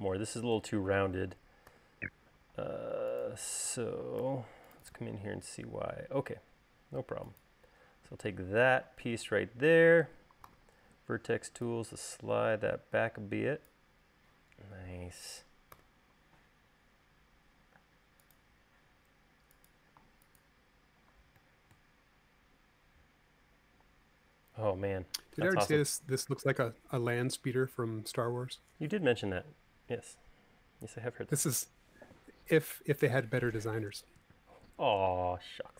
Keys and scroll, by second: 2.3 u, 4.8 u, 11.1 v, 16.3 u, 18.4 space.